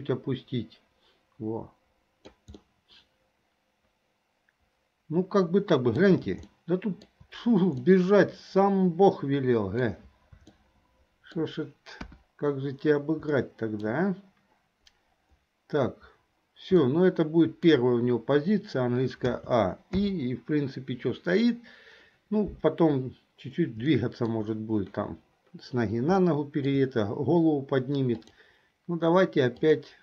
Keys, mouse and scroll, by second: 2.7-6.2 middle drag, 6.7 shift+middle click, 8.0-10.1 middle drag, 10.7-11.6 shift+middle drag, 12.8 KP_1, 13.4-14.1 middle drag, 16.9-17.9 shift+middle drag, 19.4 a, 20.1 i, 24.1 shift+middle click, 26.4 shift+middle click, 28.2 click, 29.7-30.0 drag.